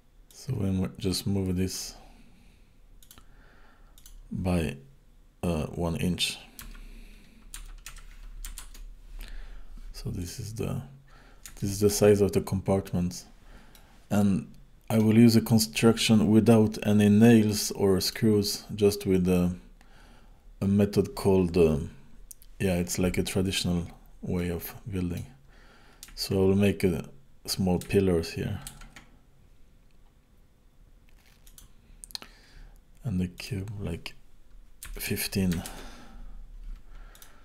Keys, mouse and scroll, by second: 0.3 click, 3.0 click, 4.0 click, 10.2 click, 10.7 scroll up 2, 11.2 scroll down 3, 11.6 shift+middle click, 12.6-13.2 scroll down 3, 13.2 scroll up 1, 13.8 middle click, 17.5 middle click, 24.4 middle click, 28.7 shift+a, 33.4 click, 37.1 click.